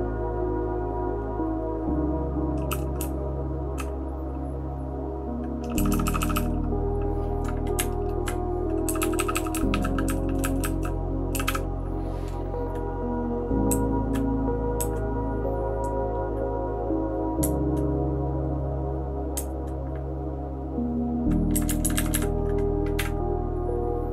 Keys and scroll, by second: 2.7 }, 3.0 {, 3.5 {, 5.7-6.3 typing, 7.7 Up, 8.8-11.4 typing, 13.7 Down, 14.8 Down, 17.4 Up, 19.3 Up, 21.5 Up, 21.6 Up, 21.8 Up, 21.9 Up, 22.1 Up, 23.0 *.